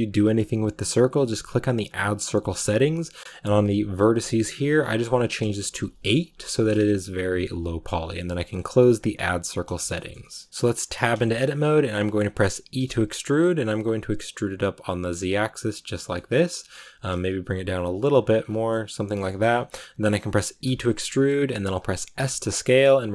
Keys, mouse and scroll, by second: 6.2 click, 9.6-10.8 shift+middle drag, 10.8 Tab, 11.1 shift+middle click, 11.5-12.1 scroll up 1, 12.1 shift+middle click, 12.7 e, 16.0 shift+middle click, 16.7 g, 18.3 scroll down 2, 18.6 middle click, 19.3 scroll up 2, 20.2 scroll up 3, 20.5 e.